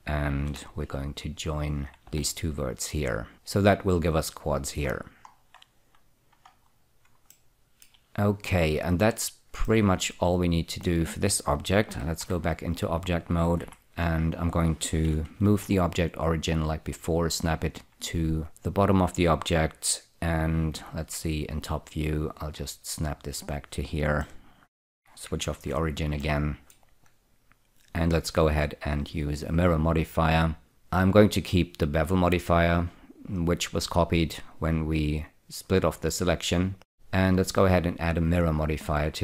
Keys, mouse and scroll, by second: 0.8 1, 1.6 click, 2.4 j, 3.3 click, 5.2-6.8 scroll down 7, 6.8-7.4 scroll down 2, 7.6-11.2 shift+middle drag, 12.6 Tab, 13.9 F4, 14.3-15.7 scroll up 2, 15.8 ctrl+<, 16.5 click, 21.1 F2, 22.6 click, 24.5 middle click, 25.8 ctrl+<, 26.5 middle click, 28.9 click, 30.7 click, 37.2 click.